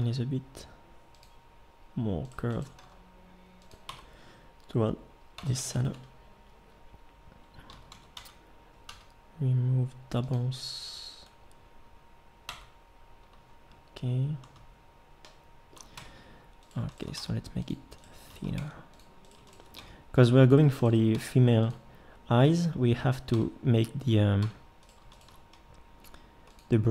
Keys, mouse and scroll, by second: 0.0 g, 2.8 g, 3.9 Tab, 7.7 a, 7.9 a, 8.2 w, 8.9 w, 12.5 Tab, 16.0 Tab, 17.2 s, 18.6 s, 19.7 s, 21.1 s, 23.3 Tab, 24.4 Tab, 26.0 g.